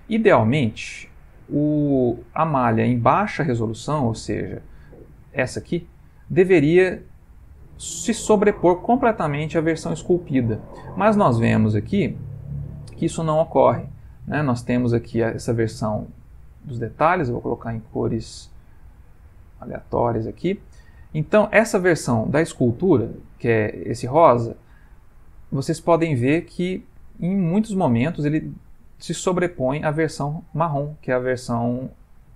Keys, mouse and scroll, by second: 13.6 click, 15.0 click, 16.9 click, 20.4 middle click, 21.2 middle click, 22.5 g, 24.9 middle click, 25.4 ctrl+middle click, 27.3 shift+middle click, 32.0 middle click.